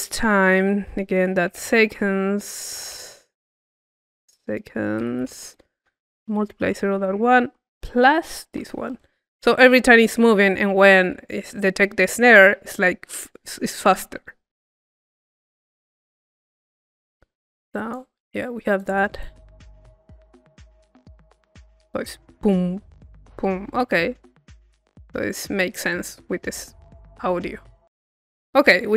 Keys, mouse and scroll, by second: 15.1-16.5 drag, 16.5-17.7 middle drag, 17.7 click, 18.7 click, 19.3 click, 20.6 click, 24.6-27.3 drag, 27.7-28.9 drag.